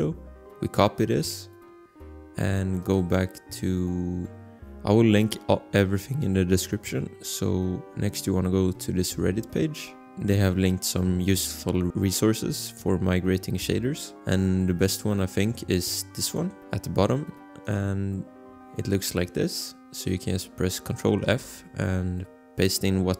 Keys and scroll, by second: 0.0 ctrl+c, 21.4 ctrl+f.